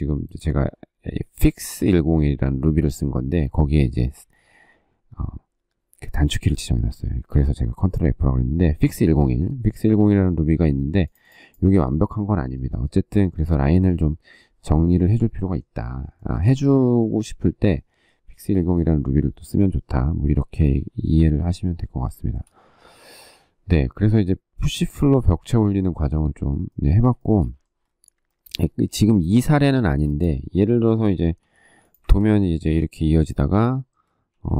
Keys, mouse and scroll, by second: 15.9 shift+middle click, 21.9 shift+middle click, 27.0 shift+middle click, 29.5 shift+middle click, 31.2 m, 34.1 q.